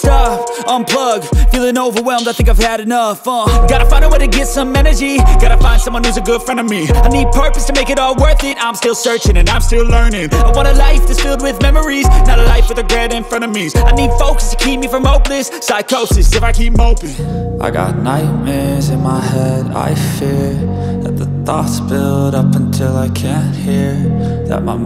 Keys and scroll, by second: 0.2-1.8 typing, 4.1 typing, 14.3 2.